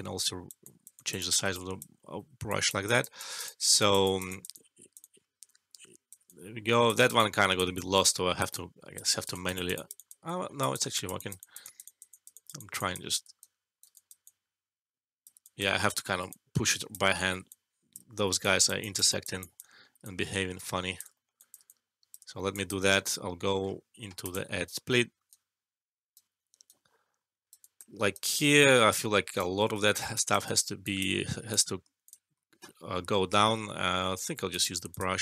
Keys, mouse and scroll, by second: 0.2 shift+click, 1.9 alt+middle click, 2.4-6.2 shift+drag, 6.2-6.8 alt+shift+click, 6.9 alt+right click, 7.1-10.2 alt+click, 7.7-9.0 alt+shift+drag, 10.3 alt+shift+middle click, 10.5 alt+click, 13.4-14.2 shift+right click, 13.9-15.7 shift+click, 15.7 ctrl+z, 16.2-17.3 shift+click, 17.0 alt+shift+middle click, 17.4-18.3 shift+click, 18.0 alt+middle click, 18.4 shift+click, 19.6 alt+middle click, 20.0-22.8 alt+shift+click, 21.1 alt+middle click, 21.3 alt+click, 21.6 alt+shift+click, 22.2 alt+shift+middle click, 22.5 alt+click, 22.8 alt+middle click, 23.5 scroll up 1, 24.2 click, 25.2-26.2 right drag, 27.5 alt+click, 27.9 alt+middle click, 28.1 alt+right click, 29.7 ctrl+z, 30.1 alt+click, 30.4 alt+right click, 30.8 alt+click, 31.4 click, 32.0 shift+click, 33.8-34.1 scroll down 1, 34.4 click.